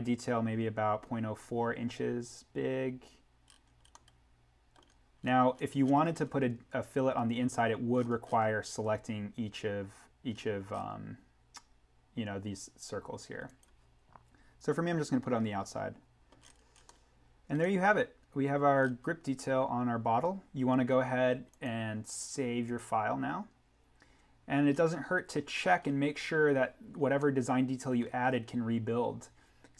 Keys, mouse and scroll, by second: 3.5-3.9 scroll up 1, 3.9 middle click, 4.1 scroll, 5.9 scroll down 1, 8.1-10.0 scroll up 1, 10.3-12.6 scroll up 1, 13.5 click, 16.3-16.8 scroll up 1, 16.8 middle click, 17.2-18.7 scroll, 21.5 click, 24.7-25.2 scroll up 1, 27.1 middle click, 27.3 scroll.